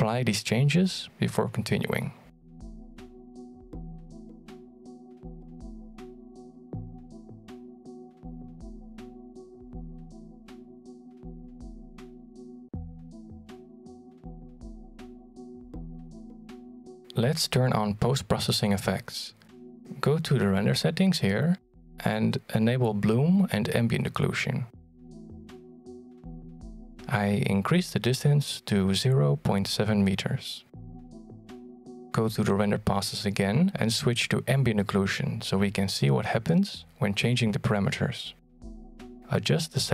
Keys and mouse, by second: 1.0 click, 2.1-4.9 drag, 5.7 click, 9.7 alt+shift+middle click, 10.1 shift+middle click, 10.7 shift+d, 11.2 r, 11.7 g, 12.4 middle click, 12.8 r, 13.2 middle click, 13.5 g, 14.0 click, 15.7 click, 17.0 right click, 17.5 click, 18.4 shift+middle click, 20.5 click, 22.1 click, 23.1 click, 23.7 click, 24.2 click, 24.7 click, 26.6 click, 27.5-30.1 drag, 31.7 shift+middle drag, 32.3-32.6 middle drag, 33.5-37.5 drag, 38.0 middle click, 38.3 alt+shift+z, 38.9 middle click, 39.4 shift+middle click.